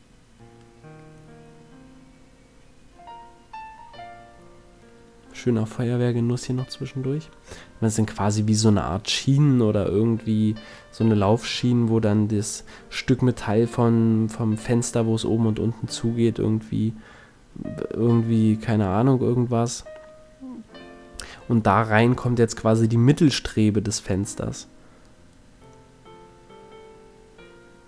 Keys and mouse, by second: 1.0 middle click, 1.6 middle click, 4.5 KP_Decimal, 6.7 shift+s, 8.4 shift+a, 12.0 s, 13.2 click, 14.0 s, 20.0 KP_1, 21.4 KP_7, 22.4 z, 23.1 middle click, 23.2 click, 24.4 s, 27.3-27.8 drag.